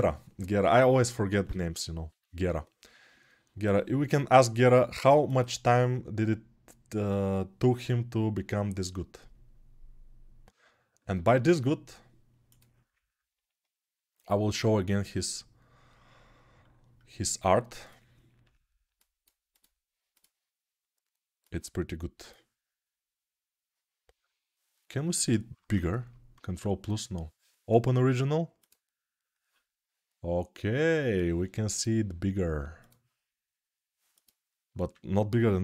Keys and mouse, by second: 32.6-35.6 drag.